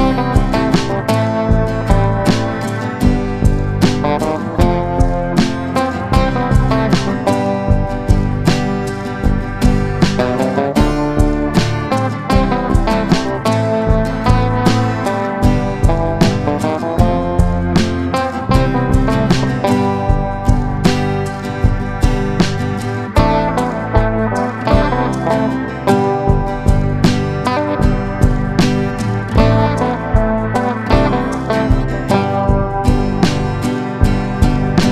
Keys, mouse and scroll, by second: 1.8 Delete, 4.9-9.5 drag, 11.4 shift+click, 12.7-23.5 drag, 32.4 click.